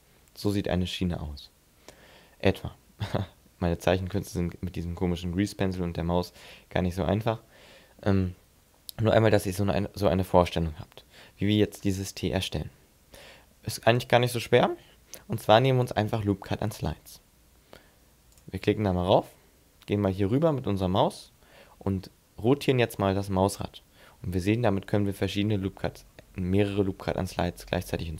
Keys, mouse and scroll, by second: 0.5 d, 0.6 d, 2.2 d, 18.3 click.